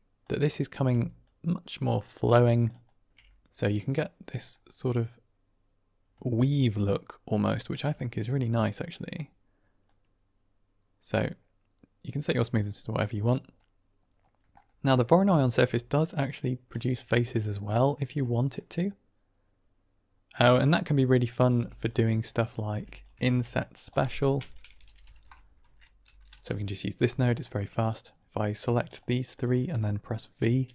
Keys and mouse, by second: 0.8 d, 1.1-2.6 drag, 2.6 d, 2.8 right click, 2.8 d, 3.1-4.4 middle drag, 4.8-6.6 middle drag, 6.8 click, 7.0 middle drag, 7.5 shift+middle click, 7.8-8.9 middle drag, 9.7-12.5 drag, 13.5 middle click, 14.5 middle click, 15.4 ctrl+shift+click, 16.2-16.8 drag, 17.6 middle drag, 18.0-19.5 middle drag, 18.5-19.1 drag, 19.7-20.5 middle drag, 21.3 click, 21.4 g, 22.1 middle click, 22.6 click, 22.6 g, 23.1 shift+a, 28.8 shift+click, 30.6 v.